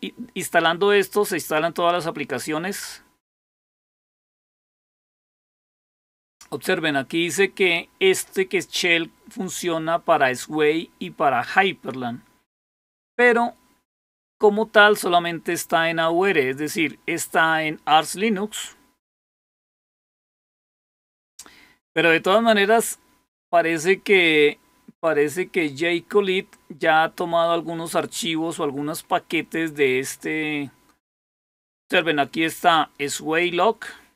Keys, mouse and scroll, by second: 2.8-3.7 scroll down 2, 3.7-4.6 scroll down 1, 4.6 scroll down 1, 5.5-6.2 scroll down 2, 12.2-15.6 scroll down 2, 33.3-34.1 drag.